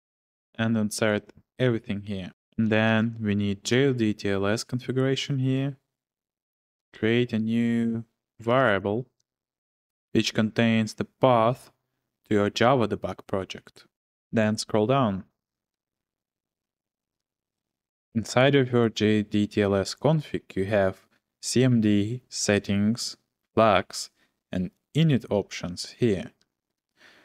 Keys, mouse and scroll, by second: 0.0-1.0 typing, 2.2-3.7 typing, 6.1-6.9 typing, 6.4 click, 8.2-10.0 typing, 14.2-15.7 j, 16.0 ctrl+f, 16.5 ctrl+f, 17.0 ctrl+f, 25.4-26.2 j, 26.4 j, 26.6 j.